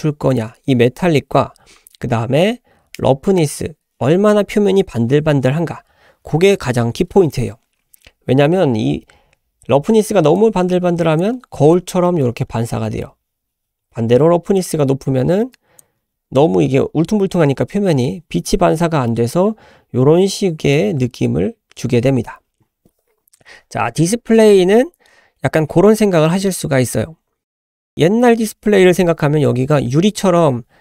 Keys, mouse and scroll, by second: 10.4 click, 11.5-11.9 scroll up 1, 12.0 shift+middle click, 12.4-13.0 middle drag, 13.1-13.4 scroll up 1, 14.6-15.8 drag, 19.1-20.7 middle drag, 21.5-22.2 scroll up 1.